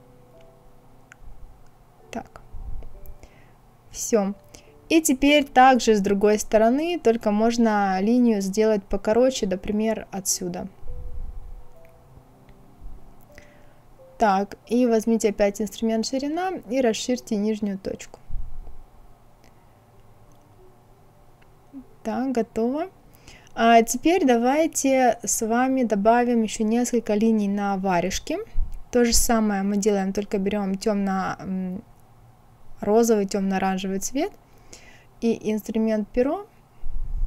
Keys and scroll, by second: 13.4 Escape.